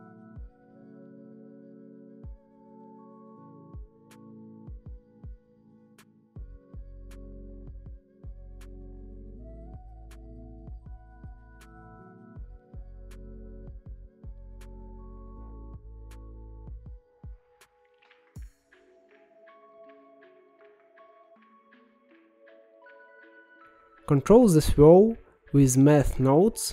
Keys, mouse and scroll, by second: 2.7-4.3 middle drag, 4.3-6.1 drag, 6.1-6.7 scroll up 3, 6.7 middle click, 7.4-9.4 drag, 10.9 click, 11.8-13.0 scroll down 16, 13.0 middle click, 14.4 middle click, 15.2 g, 16.8 middle click, 17.4-17.9 scroll up 11, 18.4-19.9 middle drag, 19.9-20.6 scroll down 1, 20.6-22.3 middle drag, 23.1-24.1 middle drag, 24.1-25.4 scroll up 2, 25.4 shift+a.